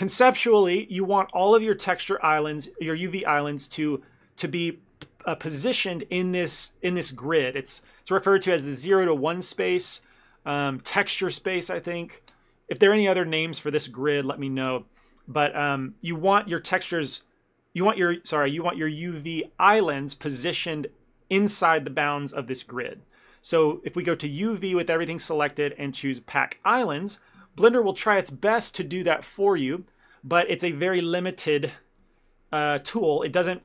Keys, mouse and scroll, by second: 3.3 scroll up 1, 3.8 scroll up 2, 4.0 shift+middle click, 4.3 ctrl+middle click, 24.1 click, 31.3 click.